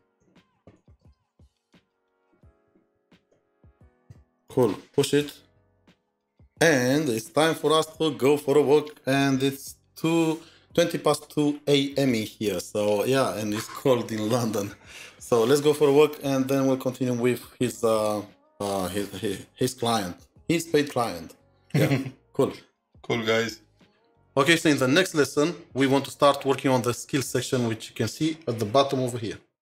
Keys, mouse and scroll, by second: 0.0-1.5 typing, 3.2 ctrl+Return.